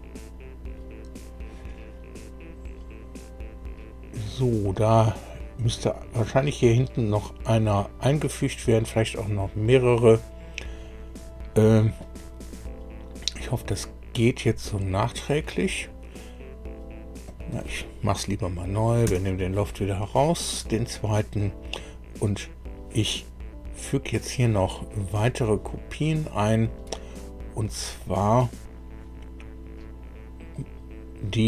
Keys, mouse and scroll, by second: 10.8 click, 17.2 click, 19.0 Delete, 28.0 click, 30.5 click.